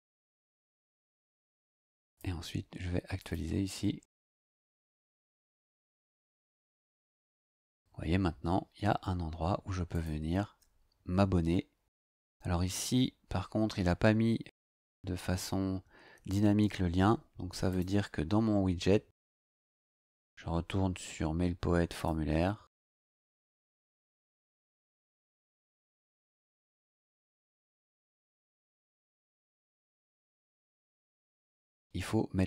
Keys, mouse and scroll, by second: 2.0 click, 3.2 click, 5.8-8.1 scroll down 8, 9.9 click, 17.7 click, 21.9 click, 28.7 click, 32.0 scroll down 1.